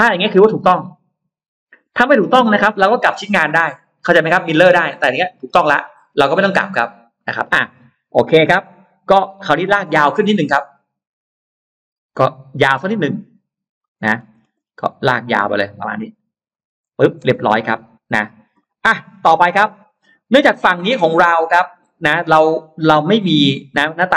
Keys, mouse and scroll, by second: 0.4 scroll down 1, 9.2 ctrl+z, 10.2 click, 13.6 click, 13.9 middle click, 14.4 middle click, 16.4 click, 17.1 space, 17.5-18.3 scroll up 2, 18.4 middle click, 18.7-19.8 scroll down 4, 19.8 middle click, 20.3 scroll down 2, 21.4 middle click, 23.2-23.9 scroll up 1.